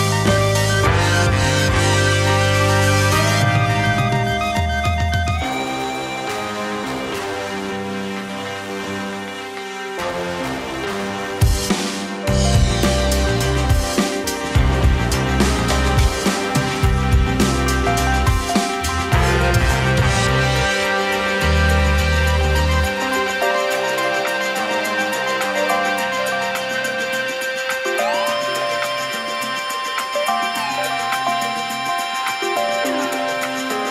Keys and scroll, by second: 0.6 2, 1.4 space, 7.0 space, 9.0 space, 14.1 z, 16.4 space, 22.7 space.